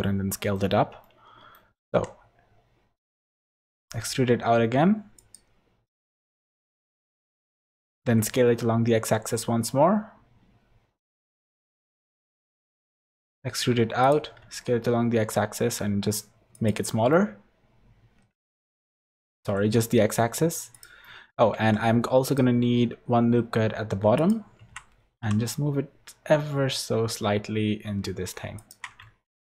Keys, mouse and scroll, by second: 1.0 middle click, 1.9 e, 5.9 middle click, 7.0 middle click, 7.7 s, 12.9 e, 14.4 s, 17.1 middle click, 18.7 ctrl+z, 19.1 s, 21.0 middle click, 21.5 ctrl+r, 24.6 Tab, 25.2 g, 29.0 Tab.